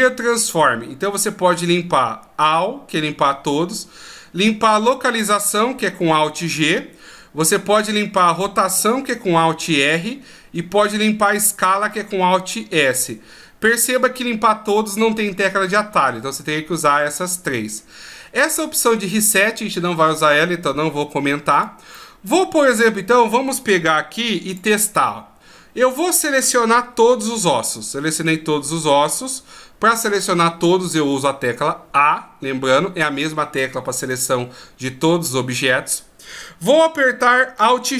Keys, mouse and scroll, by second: 21.5 right click, 21.9 scroll down 1, 22.0 middle click, 23.8 g, 25.9-26.5 scroll down 1, 26.9 a, 27.3 a.